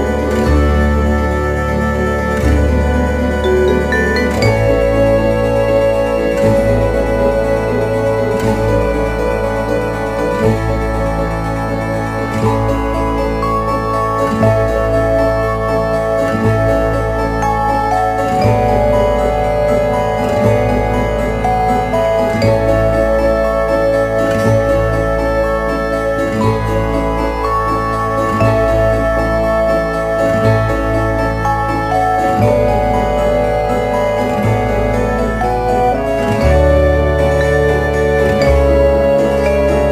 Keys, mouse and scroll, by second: 8.2 s, 12.4 click, 16.6 right click, 18.4 e, 20.9 click, 21.7 e, 25.6 click, 26.2-27.3 scroll down 1, 29.0 right click, 30.7 e, 33.7 click, 34.9 e, 37.1 click, 37.4 e.